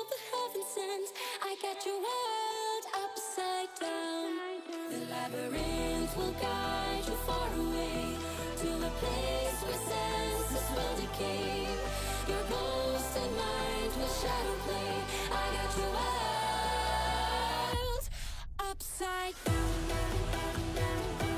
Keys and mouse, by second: 0.1 click, 0.8 3, 1.5 click, 2.0 x, 3.9 click, 5.5 z, 7.3 x, 8.2 z, 9.4 a, 9.8 click, 14.5 alt+e, 19.4 a, 20.0 shift+n, 20.9 3.